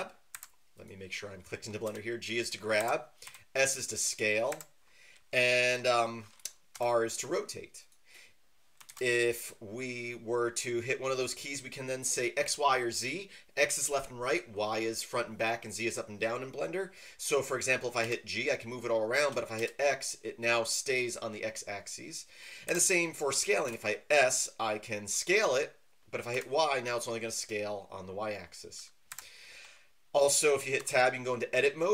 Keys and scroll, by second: 0.5 Escape, 1.8 g, 2.8 Escape, 3.2 s, 4.5 Escape, 6.7 r, 8.9 ctrl+z, 18.0 g, 19.5 x, 22.7 Escape, 23.7 s, 26.3 y, 29.1 Escape, 30.8 Tab.